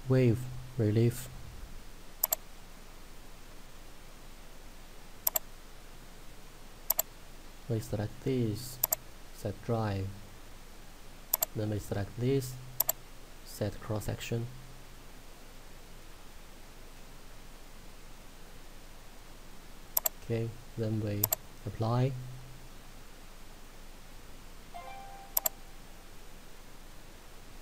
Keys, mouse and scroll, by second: 0.8-2.4 scroll down 1, 2.4 click, 6.4 shift+Num_Lock, 7.0 shift+click, 15.3 middle click, 16.4 scroll up 1, 17.0 scroll down 1, 18.5 click, 20.0 click, 25.4 click.